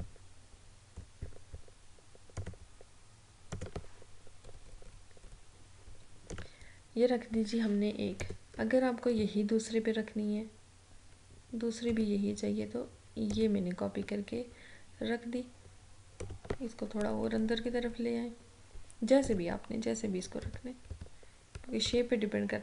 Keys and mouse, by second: 4.5 Down, 6.4-13.4 drag, 16.3 click, 17.1 Down, 19.3 click, 20.5 ctrl+-, 22.2 ctrl+-.